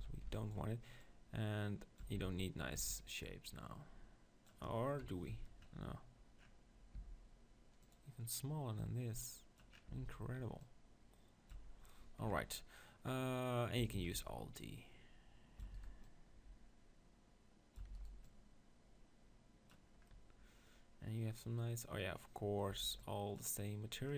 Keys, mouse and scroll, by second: 0.0 z, 0.3 b, 2.2 Tab, 2.3 z, 2.8 Tab, 5.0 KP_1, 5.3 Tab, 6.9 s, 7.9 click, 9.9 Tab, 11.7 Tab, 12.4 KP_7, 14.0 alt+d, 14.1-17.9 right drag, 14.6-16.1 drag, 15.7 alt+d, 17.9 alt+d, 18.1-20.0 right drag, 18.2-20.0 drag, 20.0 middle click, 22.7 b.